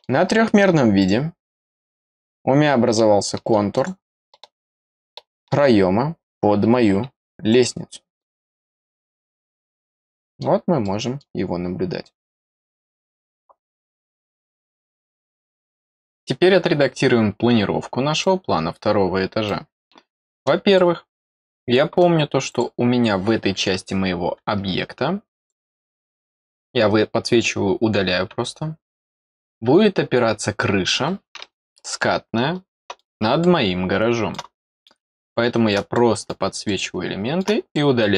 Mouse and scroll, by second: 0.4 middle click, 0.9 click, 2.2 click, 2.9 middle click, 3.7 click, 4.2-5.4 middle drag, 7.4 click, 9.3-11.1 middle drag, 11.6 scroll up 2, 15.2 click, 18.2-19.4 middle drag, 20.7 middle click, 22.5 click, 25.4 click, 29.0 click, 32.0-33.0 middle drag, 33.4 middle click, 34.5 middle click, 35.1 middle click, 35.9-37.4 middle drag, 37.7 middle click.